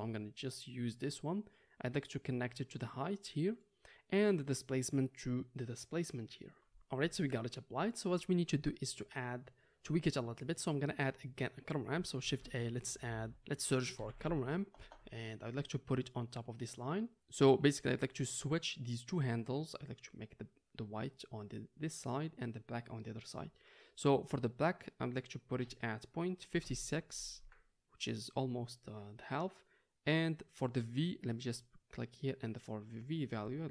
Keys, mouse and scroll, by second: 12.2 shift+a, 16.9-18.8 middle drag, 18.8-31.6 drag, 31.6-33.7 middle drag.